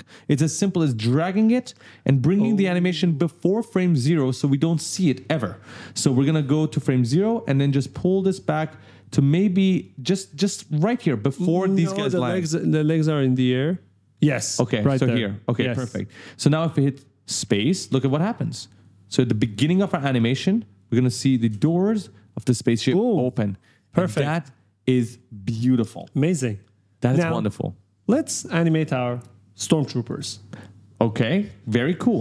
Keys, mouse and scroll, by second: 0.5 click, 5.7 click, 6.3 click, 7.8 click, 9.8-11.5 typing, 9.8 right click, 12.8 click, 14.3-15.4 typing, 16.3 click, 17.1 right click, 17.6 q, 18.6 click, 19.3 b, 19.4 right click, 20.5 click, 21.3 space, 29.8 click, 31.4-32.2 typing, 31.6 right click.